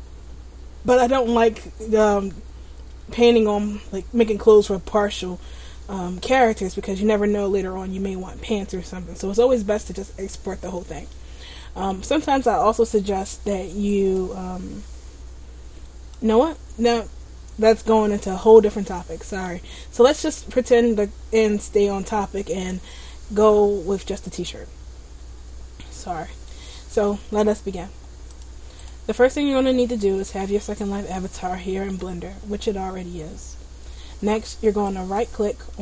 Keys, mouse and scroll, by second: 11.2 middle click, 11.9 middle click, 12.7-14.0 scroll up 1, 14.0 right click, 18.7 middle click, 28.4 click, 28.9 right click, 29.8 middle click, 31.2 middle click, 35.0 right click.